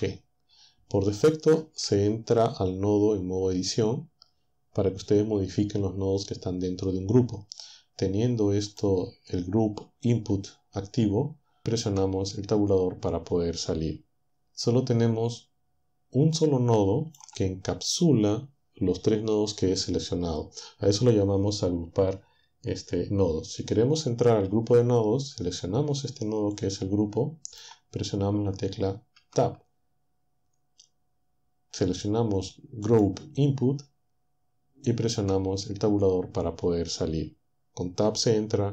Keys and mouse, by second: 8.7-11.8 drag, 11.8 Tab, 16.3-17.3 drag, 26.5-29.1 drag, 29.1 Tab, 32.9 click, 35.0 Tab.